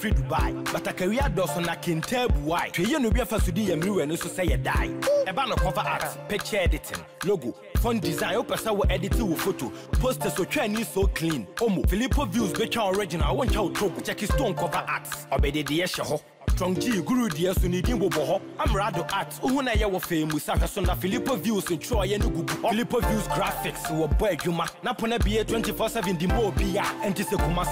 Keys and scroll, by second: 4.2 shift+F6, 9.8 Delete, 11.8 ctrl+d.